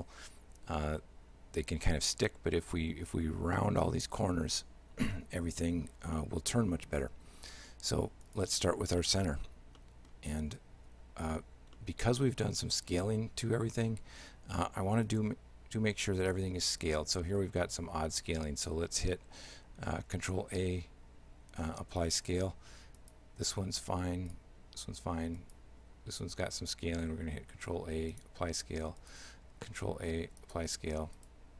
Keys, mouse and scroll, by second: 5.2 shift+middle click, 6.2 middle click, 8.3 right click, 9.0 middle click, 9.8 middle click, 11.8 shift+middle click, 15.1 right click, 20.1 ctrl+a, 23.0 right click, 24.3 right click, 25.4 right click, 27.2 ctrl+a, 29.0 right click, 29.6 ctrl+a, 31.2 right click.